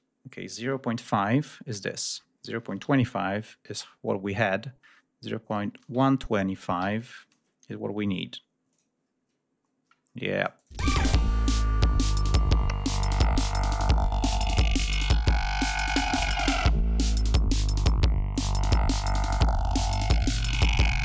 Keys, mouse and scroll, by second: 0.5 0, 0.6 ,, 0.9 5, 2.5 BackSpace, 2.7 2, 2.7 5, 5.5-7.2 typing, 8.6 click, 10.5 click, 10.7 space, 12.3 ctrl+scroll down 2, 13.3 ctrl+g, 14.0 ctrl+scroll up 2, 14.8 click, 15.7 click, 17.1 click, 18.7-19.6 ctrl+scroll down 5, 20.4 ctrl+scroll down 2.